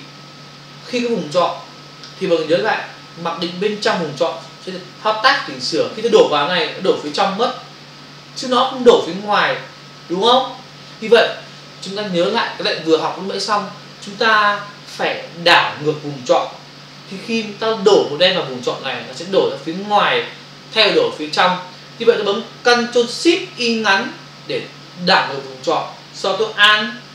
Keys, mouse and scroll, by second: 7.0 alt+BackSpace, 10.8 ctrl+alt+z.